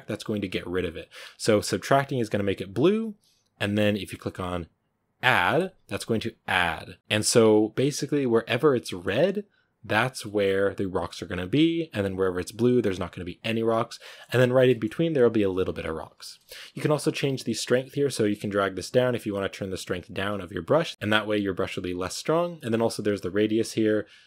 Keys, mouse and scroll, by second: 0.5-3.4 drag, 5.5-7.3 drag, 7.3-7.8 scroll down 3, 7.8 scroll up 1, 8.7-10.0 middle drag, 10.0 scroll down 1, 10.1-13.6 middle drag, 13.6-14.5 scroll up 5, 13.8 middle click, 14.5-18.1 middle drag, 18.1 click, 18.6 scroll down 1, 19.1-20.9 drag, 20.9-21.7 scroll up 1, 22.8 click, 23.4 scroll down 3, 23.8-24.2 drag.